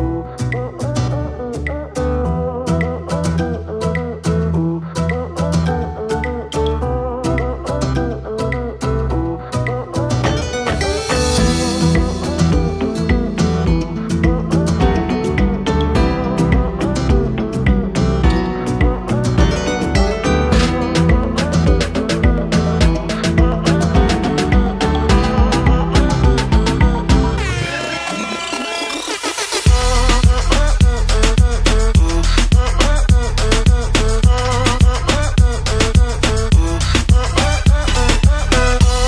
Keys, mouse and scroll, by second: 0.9 click, 3.1 click, 5.2 click, 5.3 click, 7.9 click, 9.7 click, 10.7 ctrl+a, 11.4 ctrl+c, 12.3 click, 13.7 click, 15.2 click, 15.6 BackSpace, 16.1 Return, 16.5 Right, 16.7 Right, 17.7 Left, 17.9 BackSpace, 18.1 Return, 18.6 Right, 18.7 Right, 19.6 BackSpace, 19.8 Return, 20.1 Right, 20.2 Right, 21.1 BackSpace, 21.3 Return, 22.1 Right, 22.2 Right, 22.3 Right, 23.4 BackSpace, 23.5 BackSpace, 23.9 BackSpace, 24.0 Return, 24.5 Right, 24.6 Right, 25.7 BackSpace, 26.5 BackSpace, 26.6 Return, 27.5 click, 30.1 click, 30.2 double click, 30.4 double click, 30.5 double click, 31.9 click, 32.7 click, 37.7 click.